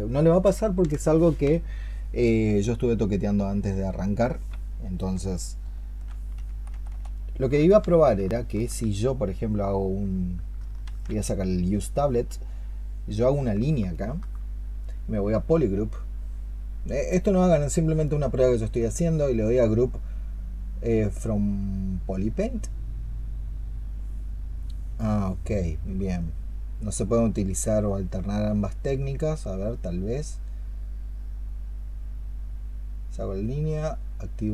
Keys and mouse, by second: 8.0 ¡, 8.2 alt+click, 11.2 ctrl+z, 13.8 alt+click.